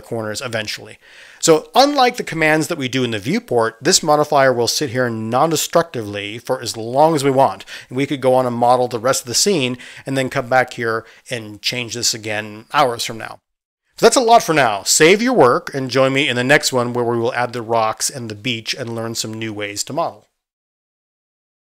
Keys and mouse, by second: 0.6-15.1 middle drag, 9.2 Tab, 15.1-17.6 drag, 17.4-20.4 middle drag, 20.4 click, 20.6 middle click.